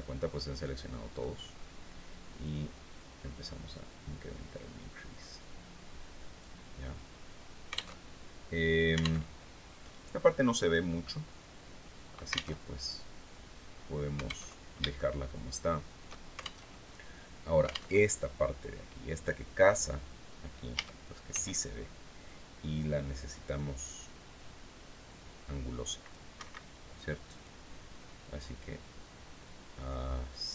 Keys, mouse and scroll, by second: 1.9-6.1 drag, 6.7-7.1 scroll down 1, 7.4 alt+Tab, 8.6 alt+Tab, 10.2 scroll down 2, 10.5-12.0 drag, 12.0 alt+Tab, 14.0 alt+Tab, 14.5-15.8 shift+middle drag, 16.1 alt+shift+Tab, 17.4 alt+Tab, 20.2 a, 20.8 c, 22.2-25.7 drag, 25.8 Escape, 26.9-30.5 drag.